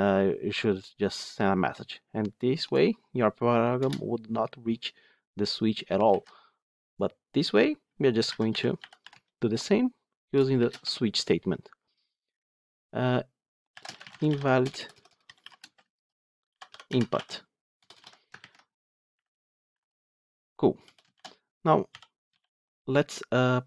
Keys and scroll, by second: 6.0 ctrl+z, 9.4 Tab, 19.1 Delete.